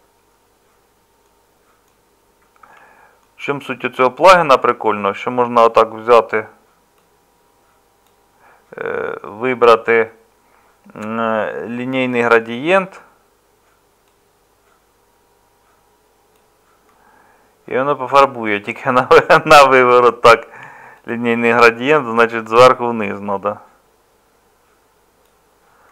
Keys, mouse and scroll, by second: 2.6 Tab.